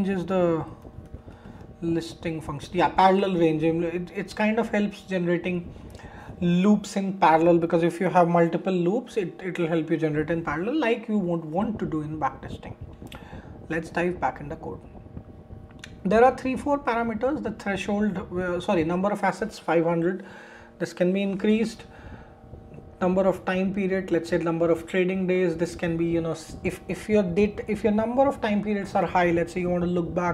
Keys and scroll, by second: 12.8 super+w.